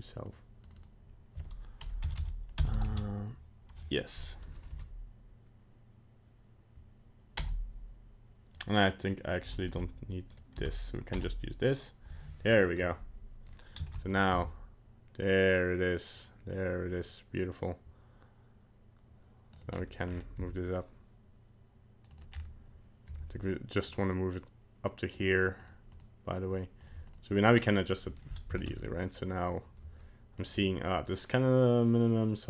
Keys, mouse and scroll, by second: 0.8 click, 2.2 BackSpace, 13.5 right click, 13.9 ctrl+Tab, 14.1 right click, 14.3 g, 19.7-20.3 scroll down 8, 20.3 g, 22.3 scroll up 4, 23.2 g, 25.2 click, 25.6 click, 25.9 click, 26.8 click, 27.1 click, 27.5 click, 28.2 right click, 28.6 ctrl+Tab, 28.8 right click, 30.4 click.